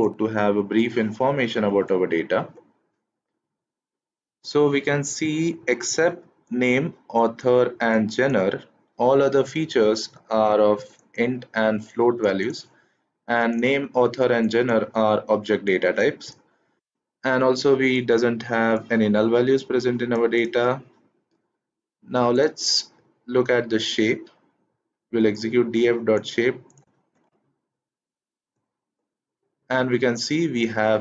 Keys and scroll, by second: 1.6 shift+Return, 27.2 shift+Return.